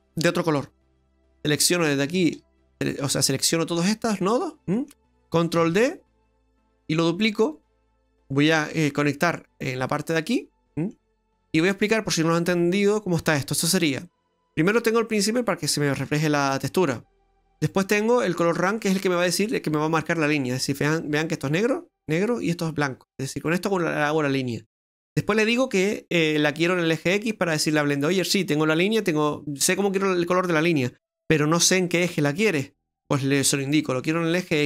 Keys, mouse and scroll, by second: 0.7 scroll down 2, 1.0 ctrl+z, 1.8 click, 2.6 click, 3.8 click, 4.8 middle click, 5.6 shift+d, 6.8 middle click, 8.1 click, 8.1 click, 8.7 click, 10.6 middle click, 11.1-11.8 scroll up 9, 13.3 middle click, 18.8 middle click, 24.2 middle click.